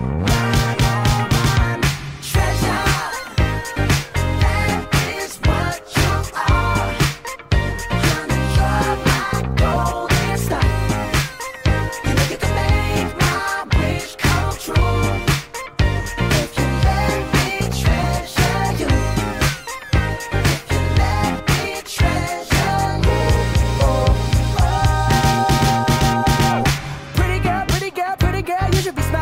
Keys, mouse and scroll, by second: 2.1 click, 2.9-3.7 scroll down 1, 3.7 u, 4.6 a, 6.1 g, 7.1 s, 9.2 g, 10.7 s, 11.3 g, 13.2 a, 14.6-15.2 scroll down 3, 15.9 click, 17.3 click, 17.9 h, 19.6 click, 19.7 h, 20.6-21.0 scroll down 4, 21.0-21.9 scroll up 4, 22.7 click, 23.0 g, 27.5 s.